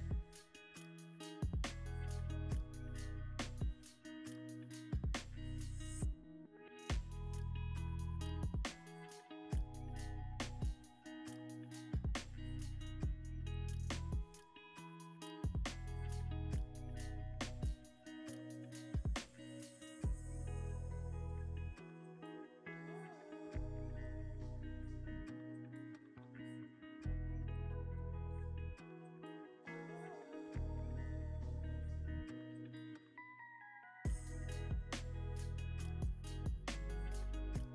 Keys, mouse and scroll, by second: 1.9 ctrl+x, 2.2 ctrl+v, 3.0 ctrl+click, 5.4 click, 6.1 ctrl+x, 6.7 ctrl+v, 7.4 ctrl+click, 10.5 ctrl+click, 15.6 ctrl+x, 15.8 ctrl+v, 16.6 ctrl+click, 17.7 ctrl+click, 17.9 ctrl+click, 18.2 ctrl+z, 19.7 ctrl+z, 33.2 scroll down 1, 34.8-37.7 typing.